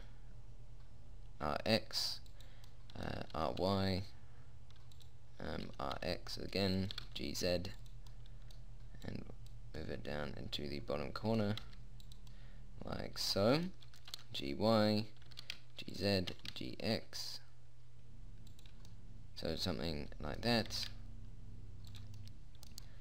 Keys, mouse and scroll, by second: 3.1 middle click, 3.7 r, 6.1 r, 7.3 g, 8.7 middle click, 10.6 middle click, 10.8 middle click, 11.9 g, 14.3 g, 15.6 g, 16.6 g, 19.7 middle click, 21.0 g.